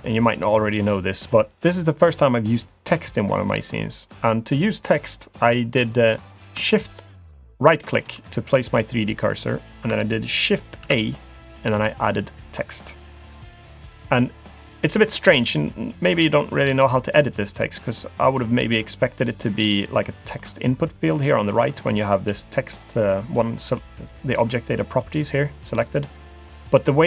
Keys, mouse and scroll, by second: 7.6 shift+right click, 10.8 shift+a, 19.5 click, 20.4-22.5 scroll down 1, 22.5-23.4 scroll down 3.